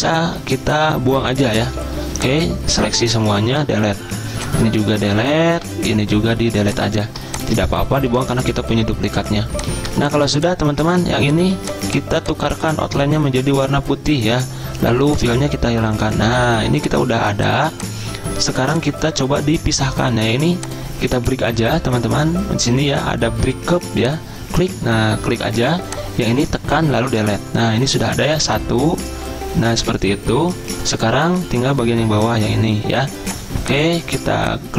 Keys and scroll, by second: 3.5 Delete, 5.6 Delete, 8.1 Delete, 27.1 Delete.